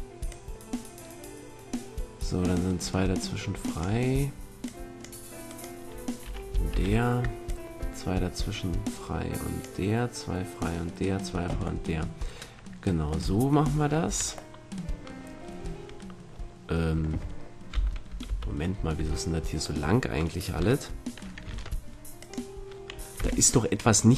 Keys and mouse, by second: 0.3-2.3 drag, 4.6-6.5 drag, 5.4-9.5 right drag, 6.7 ctrl+l, 11.8-15.5 middle drag, 13.6 a, 14.0 Tab, 17.7 KP_7, 18.2 KP_1, 18.9 Tab, 21.5 ctrl+Tab, 23.1 z.